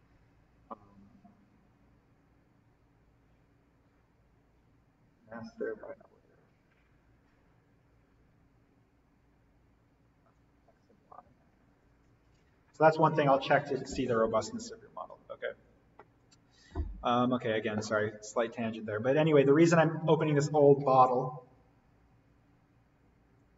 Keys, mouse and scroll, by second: 16.1 click, 23.3 click, 23.4 click.